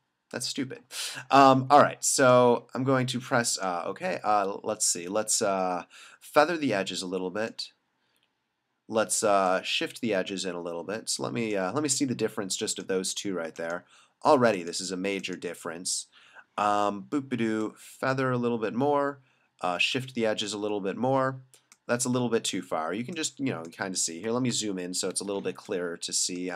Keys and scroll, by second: 24.6 super+=, 25.4 space.